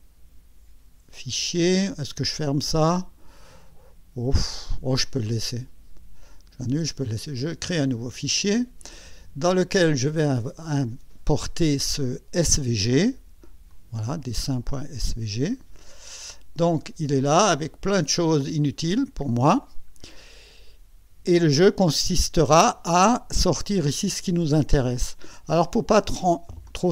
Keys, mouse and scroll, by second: 5.1 click, 6.3 click, 7.8 click, 10.2 click, 11.9 click, 13.7 click, 15.0 click, 17.1-17.4 scroll up 1, 17.6 right click, 18.4-18.7 scroll up 2, 19.0 right click, 19.6 scroll up 1, 20.1 right click.